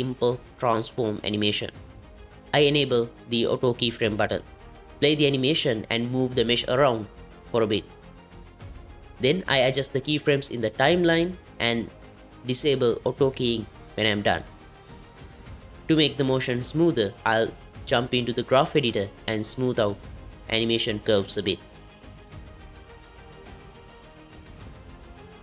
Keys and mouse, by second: 2.3 click, 3.4 g, 6.8 space, 9.6 g, 11.1 s, 12.5 click, 13.9 click, 15.6-17.4 drag, 18.4 n, 19.2 a, 19.9 alt+s, 22.1-25.4 drag.